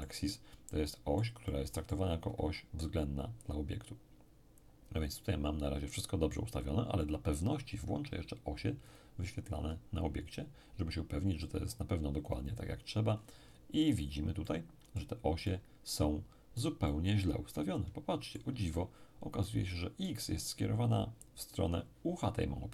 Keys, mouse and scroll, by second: 8.9 click, 9.5-12.0 scroll down 1, 12.3 click, 13.1-14.4 scroll up 1, 14.4-19.3 middle drag, 18.5 z, 19.4-21.0 middle drag.